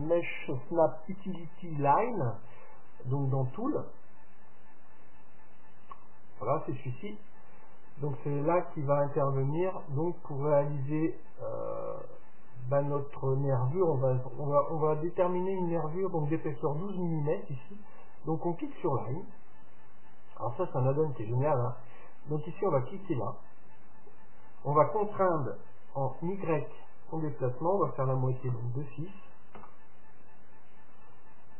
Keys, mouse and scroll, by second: 3.3-6.8 drag, 18.4-20.1 drag.